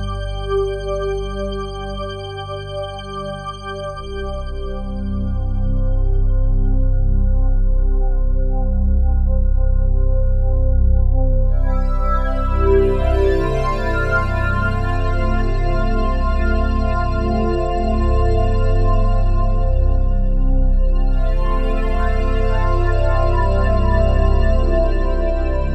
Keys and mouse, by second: 3.6 typing, 6.0 typing, 7.7 typing, 8.6 Escape, 9.2 r, 9.6 z, 10.9 Escape, 13.9 alt+r, 16.5 r, 17.0 z, 19.5 click, 20.9 r, 21.2 y, 21.3 y, 22.7-25.2 drag, 24.6 g, 25.2 x.